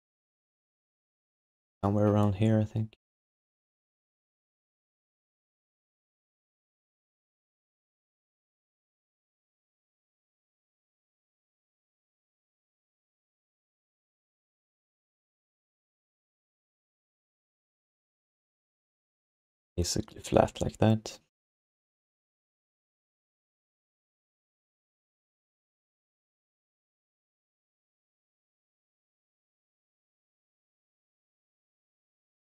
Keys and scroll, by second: 3.4 f, 10.4 r, 17.9 3, 26.1 f, 26.9 alt+shift+d, 27.2 1, 28.0 alt+q, 29.1 q, 32.1 w.